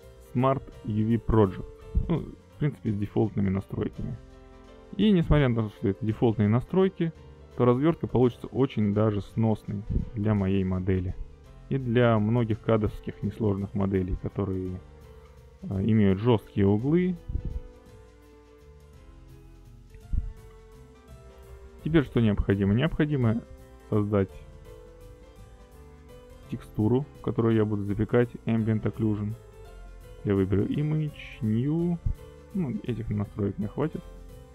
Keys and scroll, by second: 8.8 ctrl+space, 9.8 a, 13.9 ctrl+space.